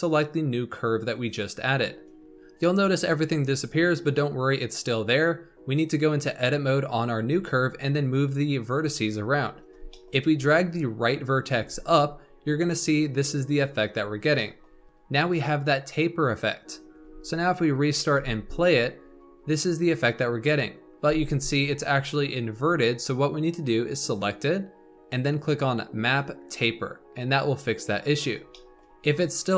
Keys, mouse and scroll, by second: 2.0 scroll down 1, 2.2-4.0 shift+middle drag, 5.7 click, 7.2 Tab, 7.9 click, 9.3-9.8 scroll down 2, 9.8-11.5 shift+middle drag, 11.5 g, 13.9-14.3 scroll up 3, 14.3 shift+middle click, 14.8 scroll up 2, 16.7 scroll down 3, 16.9 Tab, 17.7-18.1 drag, 18.1 space, 21.0 space, 21.2 scroll up 2, 24.0 click, 26.0 click, 28.0-28.4 scroll down 3, 28.4-29.5 shift+middle drag.